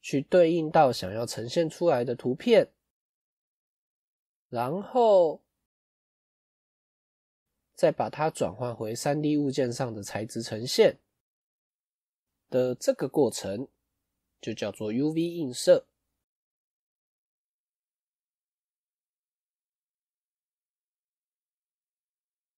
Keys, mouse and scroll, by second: 8.3-8.7 scroll up 2, 8.7 middle click, 10.0 Tab, 11.3 middle click, 13.6 middle click, 14.6-16.7 scroll down 1.